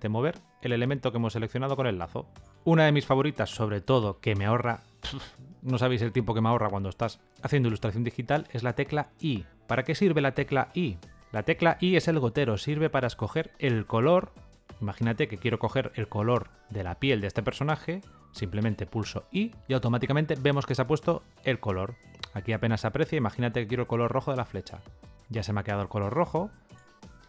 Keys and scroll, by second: 8.8 i, 10.3 i, 18.9 i.